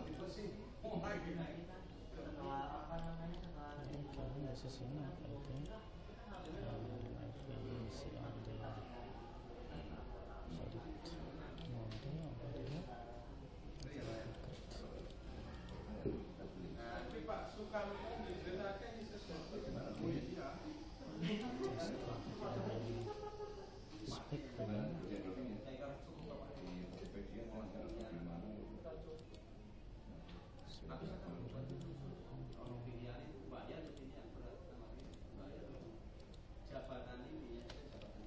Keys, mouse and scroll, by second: 2.5 middle click, 3.5-5.5 middle drag, 5.7 click, 7.1-8.9 middle drag, 9.5-11.7 middle drag, 12.0-13.1 middle drag, 13.2 middle click, 13.9 middle click, 15.1-17.9 right drag, 18.6 right click, 18.9 right click, 19.0-21.4 middle drag, 21.4 right click, 23.0-28.8 drag, 30.7 click, 36.4 right click, 38.1-38.2 middle drag.